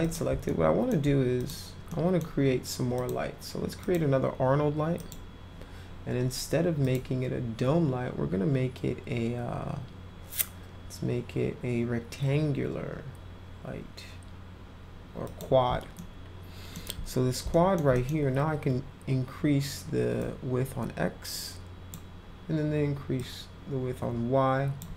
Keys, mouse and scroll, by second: 0.0 click, 0.4 alt+middle click, 1.3 click, 1.8 middle click, 2.9 click, 3.8 click, 4.9 click, 6.8 click, 15.2 click, 16.0 alt+middle click, 17.5 alt+middle click, 17.9 middle click, 20.1-21.9 drag, 23.1-24.7 drag.